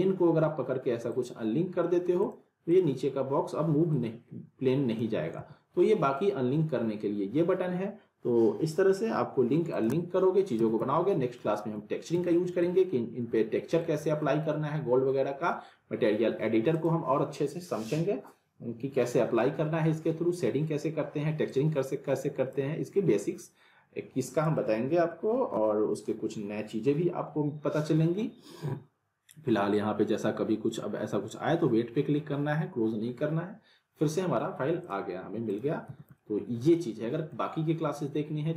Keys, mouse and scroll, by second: 1.8 alt+middle click, 2.2-5.2 drag, 5.4 ctrl+z, 9.7 click, 10.5 z, 10.9-11.5 alt+middle click, 11.5 alt+middle click, 13.2 scroll down 1, 13.3-14.0 alt+middle click, 14.0 alt+middle click, 16.7 click, 21.5-35.1 drag, 34.8 click, 35.8 z, 36.2-37.4 alt+middle click, 36.8-38.5 alt+middle drag.